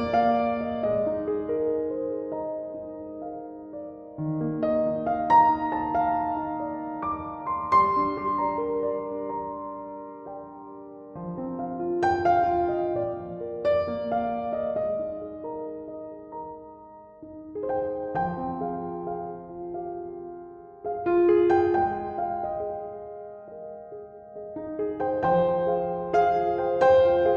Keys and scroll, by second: 10.3-11.1 typing.